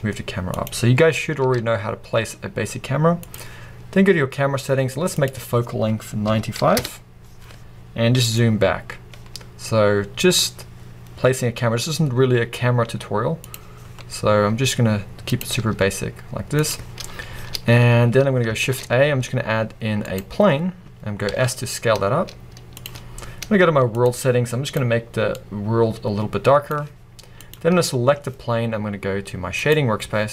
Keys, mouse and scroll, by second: 0.7 click, 1.4 r, 3.4 click, 6.8-13.6 drag, 6.9 Return, 8.2 g, 14.4 r, 15.4 click, 15.7 g, 16.7 click, 17.0-17.9 scroll down 1, 17.9-18.4 scroll up 1, 20.2 shift+a, 20.5 scroll down 1, 21.4 s, 22.9 click, 29.7 click.